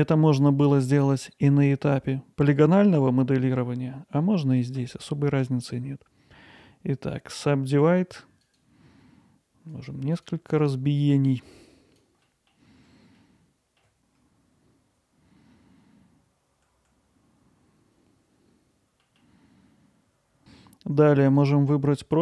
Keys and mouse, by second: 9.7 click, 10.2-12.0 drag, 12.3 middle click, 12.5 alt+middle click, 14.4 drag, 14.7 alt+middle click, 14.8 alt+middle click, 15.1 click, 15.8 middle click, 16.1 alt+middle click, 16.5 click, 16.6 alt+middle click, 17.3 middle click, 17.7 alt+middle click, 18.4 alt+middle click, 18.8 click, 19.0 alt+middle click, 19.4 alt+middle click, 19.9 middle click, 20.3 middle click.